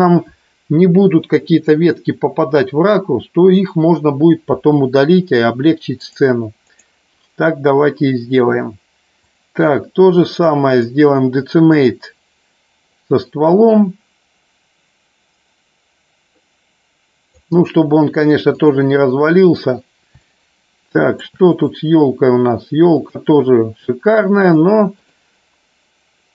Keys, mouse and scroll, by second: 6.0-8.4 drag, 9.2 click, 10.7-11.9 drag, 12.9-17.3 drag, 18.5-19.6 drag, 20.1 shift+middle click, 21.3 click, 23.0-25.3 drag.